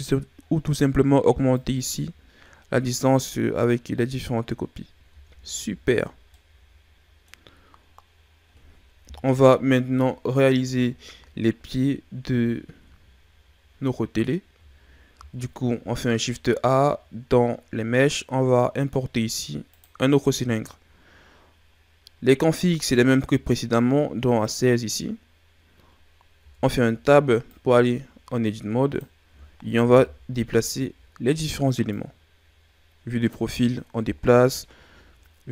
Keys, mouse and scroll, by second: 1.5 click, 5.1 a, 5.5-6.3 scroll down 5, 6.3-7.4 middle drag, 7.4-7.9 scroll up 4, 7.9 scroll down 4, 9.0 KP_1, 10.8 shift+scroll down 4, 11.5-12.4 scroll up 2, 12.5 shift+scroll up 2, 13.1-13.7 scroll down 1, 15.1 shift+a, 26.3 Tab, 27.5 click, 29.8 KP_3, 31.8 click, 34.0 KP_1.